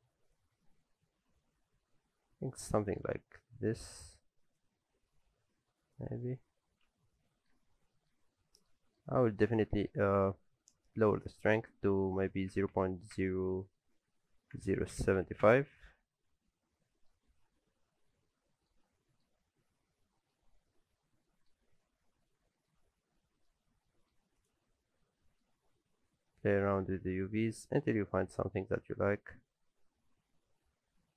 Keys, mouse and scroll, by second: 0.3 click, 0.6 Tab, 0.9 a, 2.1 s, 6.6 alt+a, 6.9 Tab, 7.0-7.3 scroll down 3, 7.3 middle click, 7.5 alt+a, 7.9 shift+middle click, 8.2 scroll up 2, 8.4 middle click, 8.8 shift+middle click, 9.1 scroll up 1, 9.3 middle click, 9.5 shift+middle click, 11.2 click, 16.3 scroll down 3, 16.5 middle click, 17.1-17.4 scroll down 1, 17.4 middle click, 18.8 shift+middle click, 20.0-20.4 scroll down 2, 20.1 middle click, 20.4-21.3 scroll up 9, 21.0 middle click, 21.5-21.8 scroll down 3, 21.8 shift+middle click, 22.8-23.1 scroll up 1, 23.2 middle click, 23.5 scroll up 1, 23.9 shift+middle click, 24.4 click, 24.9 scroll up 1, 25.2 middle click, 25.6 Tab, 26.3 a, 26.8 s.